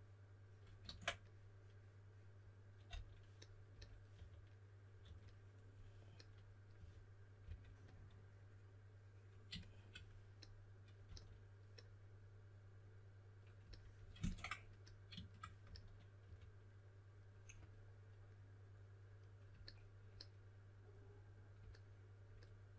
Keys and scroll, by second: 0.8 super+z, 2.8 s, 4.1-5.0 typing, 6.7-7.4 typing, 11.0 s, 15.6-16.7 typing.